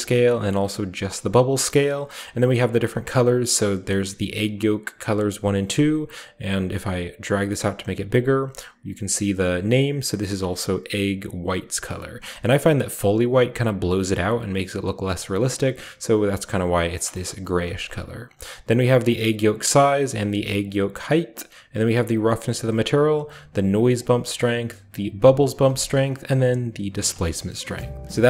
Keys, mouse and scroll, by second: 1.9 typing, 2.7 click, 7.2 click, 8.0 click, 10.3 click, 11.2 click, 12.6-14.9 drag, 18.2-20.6 drag, 19.3 right click, 20.4 right click, 21.1-22.6 drag, 22.4 right click, 22.8-23.9 drag, 23.8 right click, 24.2-25.3 drag, 25.6-26.9 shift+drag, 27.1-27.9 shift+scroll down 1, 27.2 shift+middle click, 27.9 shift+scroll down 1.